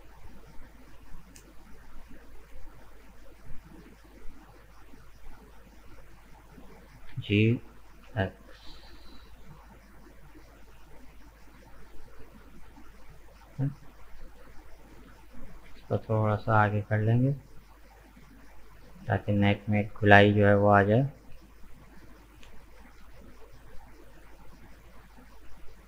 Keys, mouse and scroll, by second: 5.6 right click, 5.9-7.1 middle drag, 7.1 g, 10.7-13.9 middle drag, 14.3 right click, 14.8 shift+right click, 15.7 g, 19.3 right click, 19.6-20.9 middle drag, 20.9 g, 22.8 g, 24.6-25.8 middle drag.